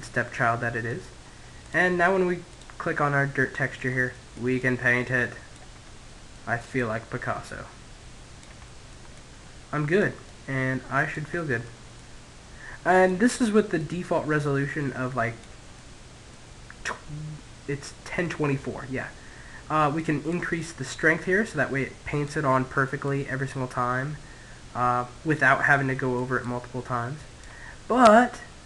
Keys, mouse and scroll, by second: 1.3 click, 2.4-3.6 middle drag, 3.6 click, 5.0 middle click, 5.6 click, 7.9-10.7 drag, 10.9 click, 12.7 click, 14.6-16.2 middle drag, 16.6-18.3 middle drag, 18.7-21.3 drag, 21.3 middle click, 21.8 click, 24.7 middle click, 25.2 click, 26.7-28.6 middle drag.